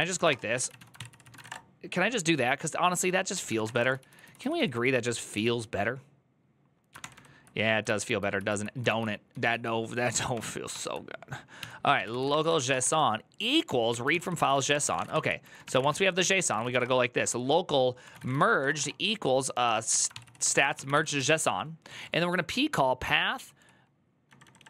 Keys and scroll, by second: 0.0-1.7 typing, 2.8-4.7 typing, 6.8 ctrl+d, 6.8 j, 6.9 ctrl+d, 9.1 ctrl+u, 9.1 typing, 10.1 ctrl+d, 10.5 ctrl+d, 11.1-13.1 typing, 13.7 Tab, 13.9 ctrl+c, 14.0 ctrl+c, 14.1 ctrl+c, 14.2-24.6 typing.